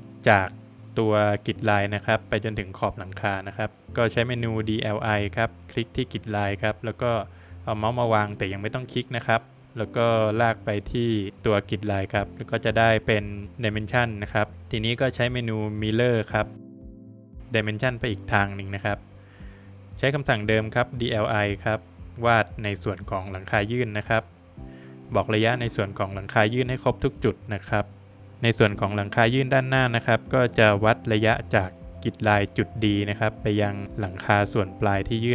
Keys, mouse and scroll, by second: 0.0 space, 2.6 Escape, 2.8 Escape, 3.9 space, 4.8 click, 8.3 click, 10.5 click, 10.9 scroll down 2, 11.1 middle click, 11.5 click, 13.0 space, 14.3 space, 14.5 middle click, 14.5 scroll down 1, 14.7 middle click, 15.7 scroll up 1, 16.6 Escape, 16.6 scroll up 1, 16.9 Escape, 18.5 space, 19.8 click, 22.5 click, 23.2 click, 23.5 scroll down 2, 23.7 middle click, 24.5 middle click, 26.0 space, 31.2 click.